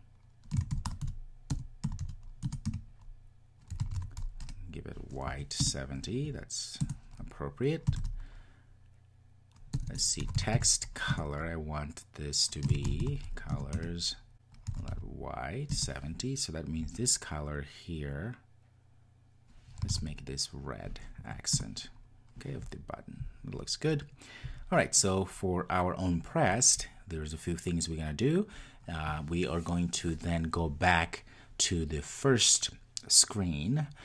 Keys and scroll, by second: 0.9 Return, 11.1 Return, 15.7 Return, 21.5 Return.